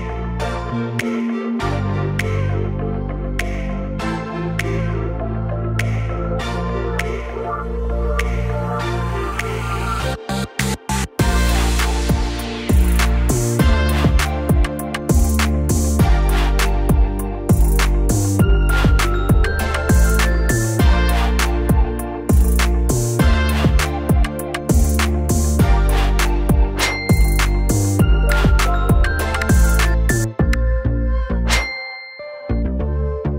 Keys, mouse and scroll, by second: 1.2 typing, 1.5-4.4 drag, 4.4 click, 5.1-5.5 typing, 5.7 Return, 10.4-16.4 drag, 19.0 click, 21.4-25.8 drag, 26.3-27.1 typing, 28.3-33.3 drag.